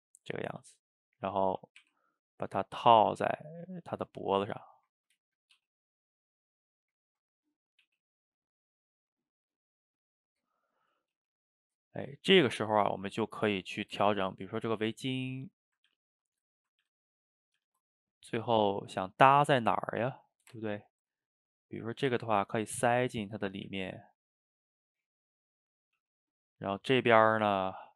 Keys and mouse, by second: 0.5 a, 1.0 middle click, 1.8 r, 2.8 g, 4.2-5.6 middle drag, 5.6 g, 6.4-7.8 middle drag, 7.8 g, 11.0 click, 11.2 g, 11.8-13.8 middle drag, 13.8 click, 14.1 ctrl+x, 15.1 click, 15.5 middle click, 15.9 ctrl+x, 16.4 click, 16.9 ctrl+x, 17.3 click, 17.6 ctrl+x, 18.0 click, 18.4-20.1 middle drag, 20.1 click, 20.8 ctrl+x, 21.4 click, 21.6 middle click, 22.1 e, 23.1-23.7 middle drag, 23.7 e, 25.0-25.8 middle drag, 25.8 click, 26.0 g, 26.6 click, 26.8-27.9 middle drag.